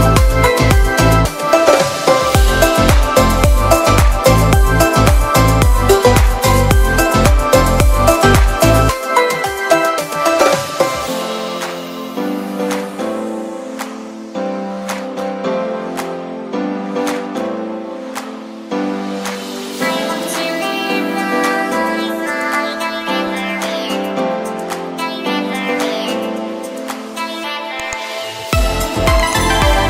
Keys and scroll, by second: 15.0 b.